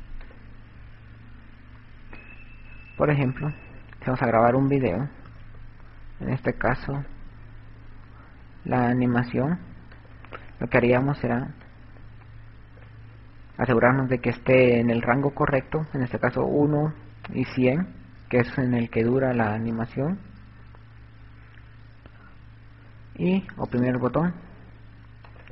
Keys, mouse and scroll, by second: 0.5 click, 1.0 click, 4.9 click, 7.1 click, 10.4 click, 12.1 click.